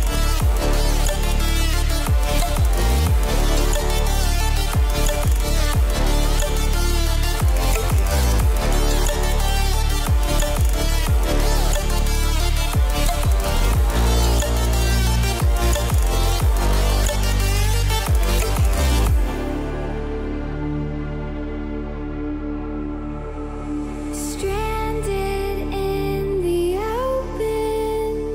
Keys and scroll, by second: 19.4 ctrl+t.